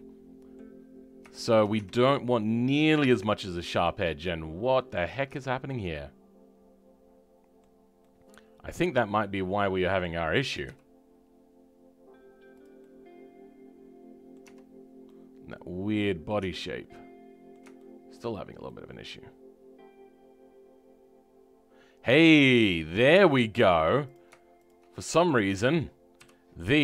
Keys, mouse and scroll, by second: 0.7-1.3 scroll up 2, 1.3 shift+middle click, 1.7 Tab, 4.0-5.1 middle drag, 5.1 scroll up 1, 5.3-10.6 shift+middle drag, 10.6 g, 12.8-14.4 middle drag, 14.4 Tab, 14.6 scroll up 2, 15.0-16.4 middle drag, 16.4 Tab, 16.9-22.3 middle drag, 22.3-22.7 scroll down 2, 22.7 scroll up 2, 24.1 click, 25.0-26.8 middle drag.